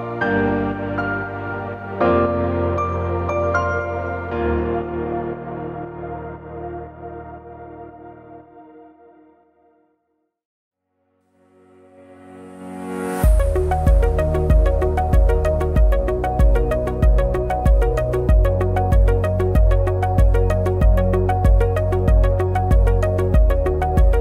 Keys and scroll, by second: 0.3 ctrl+e, 0.3 ctrl+f, 3.9 ctrl+shift+a, 6.7 ctrl+shift+a, 7.1 Delete, 7.5 ctrl+-, 8.4 ctrl+=, 16.4 ctrl+=, 17.0 ctrl+c, 17.1 ctrl+f, 22.3 ctrl+c.